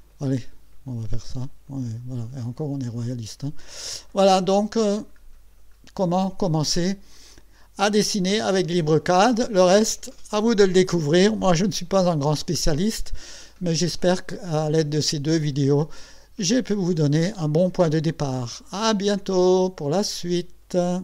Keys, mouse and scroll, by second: 0.2 click, 1.7 click, 2.9-3.3 scroll up 1, 3.9-4.9 middle drag, 4.9 scroll up 1, 5.2 scroll down 1.